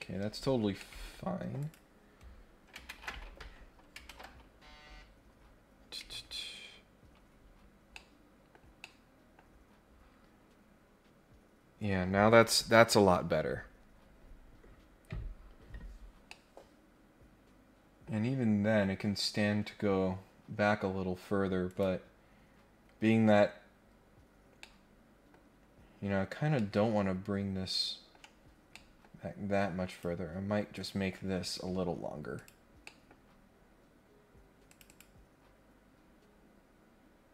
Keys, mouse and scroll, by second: 0.1-0.6 scroll down 3, 0.8 middle click, 1.6 click, 4.1 ctrl+Tab, 7.7 scroll down 2, 7.9 middle click, 8.8 middle click, 9.6-10.5 scroll up 3, 16.2-18.0 middle drag, 18.3-18.9 scroll down 4, 19.6 scroll up 2, 21.6 click, 24.6 middle click, 26.6-28.1 middle drag, 28.7 middle click, 29.9 click, 30.7 click, 32.3 click, 32.8 scroll up 1, 33.2 scroll down 1, 34.6 click, 34.8 click, 36.7 scroll up 1.